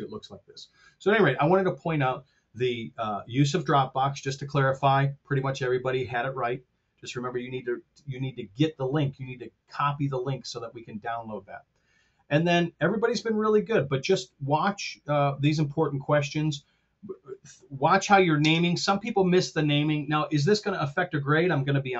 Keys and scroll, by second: 18.3 shift+space.